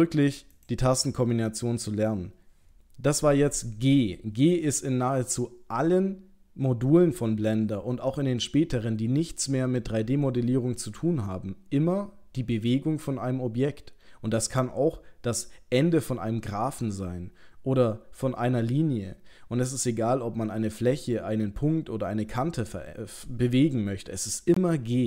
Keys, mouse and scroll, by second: 1.0 middle click.